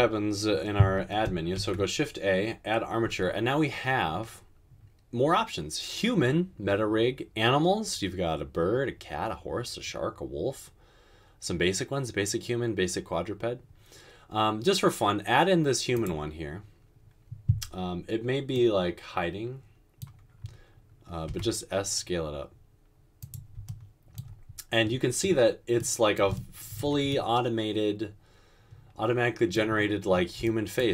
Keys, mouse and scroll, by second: 1.8 a, 21.5 s.